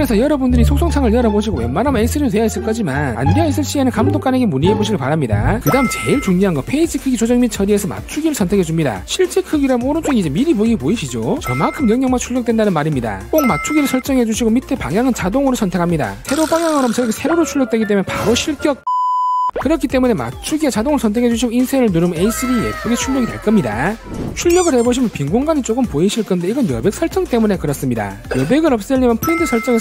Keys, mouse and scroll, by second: 8.8 click, 10.0 click, 14.6 click, 17.1 click.